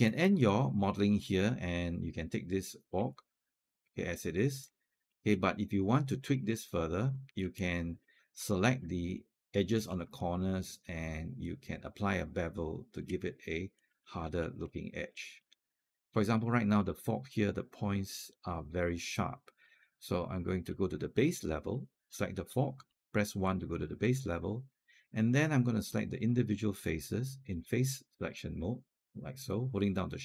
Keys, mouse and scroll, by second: 0.3-2.7 alt+drag, 2.9-4.5 alt+drag, 4.9 alt+middle click, 5.2 alt+click, 6.3 alt+middle click, 7.4 alt+click, 8.0 scroll up 1, 8.3 alt+click, 9.0-9.7 scroll up 1, 9.7 scroll down 1, 10.0-12.8 alt+drag, 13.1 alt+click, 13.9 scroll up 1, 14.2 alt+middle click, 14.6 alt+click, 15.2 alt+middle click, 15.8 scroll up 1, 16.2 alt+click, 18.9 alt+click, 20.9 1, 21.6 click, 22.7 1, 23.3 alt+click, 24.6 right click, 26.0 click, 26.6 shift+click, 27.3 shift+click, 28.0 shift+click, 28.7 shift+click.